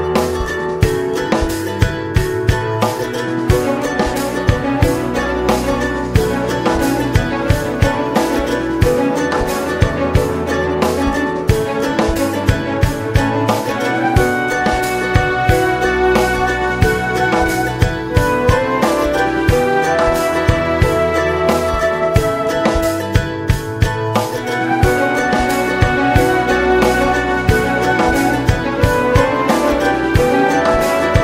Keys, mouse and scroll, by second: 0.1 middle click, 0.9-4.2 middle drag, 4.4 m, 5.4 n, 5.8 middle click, 6.4-7.6 middle drag, 7.6-8.8 drag, 8.8 scroll, 9.1 middle click, 9.5-10.7 scroll, 10.7-19.2 drag, 19.2-20.0 scroll up 5, 20.6-28.4 drag, 28.8 ctrl+z, 29.4-31.2 drag.